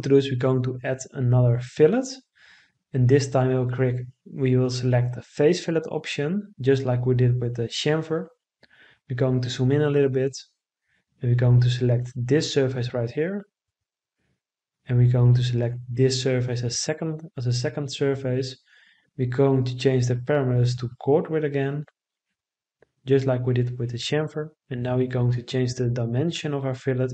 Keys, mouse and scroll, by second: 25.6 1, 26.1 0.